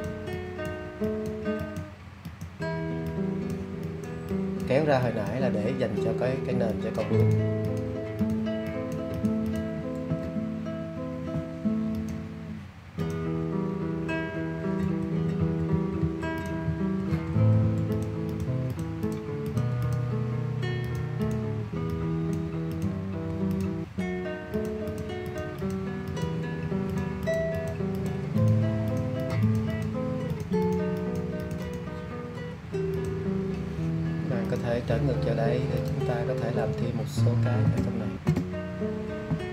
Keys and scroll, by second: 15.1 alt+[, 15.7-17.9 typing.